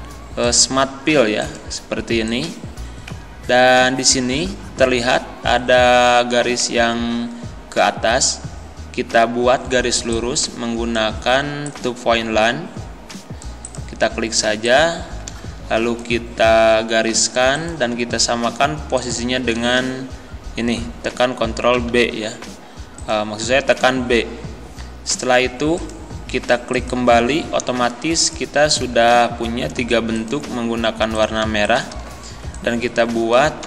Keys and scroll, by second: 21.8 b.